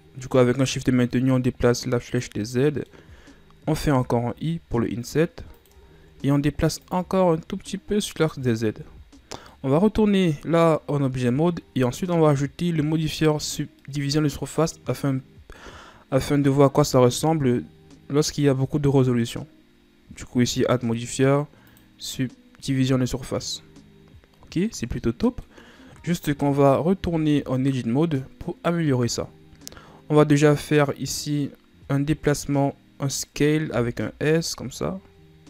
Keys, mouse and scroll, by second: 2.8-3.9 middle drag, 3.9 l, 6.1-7.0 ctrl+scroll down 1, 7.0-8.9 drag, 8.9 Tab, 9.5 scroll down 1, 9.7-11.2 middle drag, 11.2-14.0 scroll up 1, 14.0-16.8 middle drag, 16.8-19.7 ctrl+scroll up 2, 20.8-22.9 drag, 22.9 scroll down 1, 23.2-25.8 middle drag, 25.8-26.9 scroll up 4, 26.9-27.3 scroll down 2, 27.3 Tab, 33.9 s.